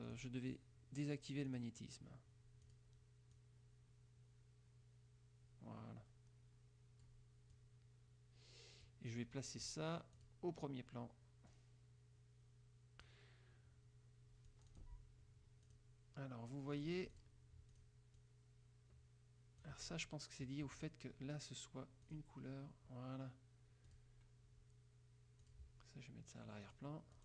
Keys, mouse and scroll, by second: 0.3 click, 1.7 click, 2.9 click, 3.5-7.4 drag, 7.7-9.2 drag, 10.3 click, 11.7-13.4 drag, 14.7 click, 15.8 click, 16.9 click, 17.9 click, 18.3-20.2 drag, 20.9 click, 22.1 click, 24.0 click, 25.6 click, 26.8 click.